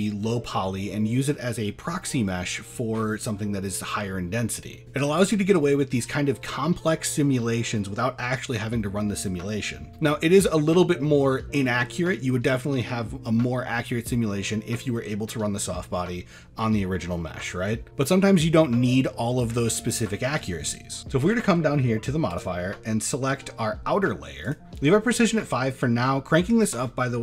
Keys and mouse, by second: 22.3-24.6 drag.